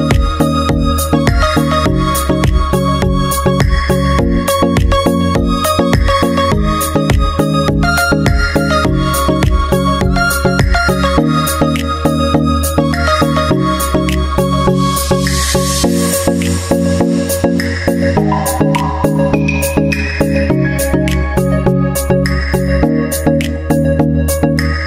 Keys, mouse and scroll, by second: 0.0 s, 1.5-5.2 drag, 5.3-6.4 drag, 6.6-7.6 drag, 7.7 middle click, 8.5-10.4 drag, 10.4 middle click, 10.9-13.7 drag, 13.7-16.3 middle drag, 16.3-17.4 drag, 17.1 KP_Decimal, 17.4 middle click, 18.8-20.1 drag, 20.2 click, 23.4-24.5 right drag.